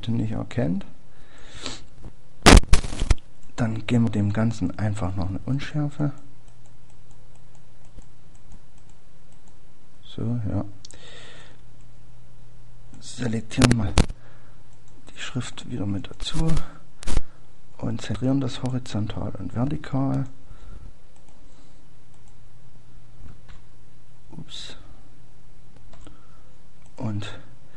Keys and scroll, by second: 9.3 typing, 15.5-16.2 typing.